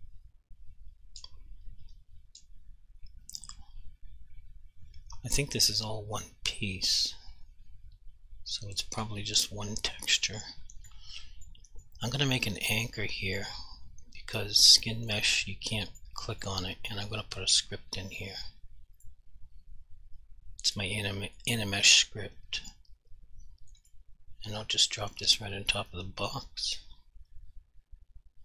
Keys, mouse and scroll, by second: 10.3 alt+click, 11.4 alt+click, 11.8 alt+click, 12.4 double right click, 13.0 click, 13.4 double click, 14.4 alt+click, 15.6 alt+click, 19.1 click, 21.5 click, 23.9 click, 25.1 click.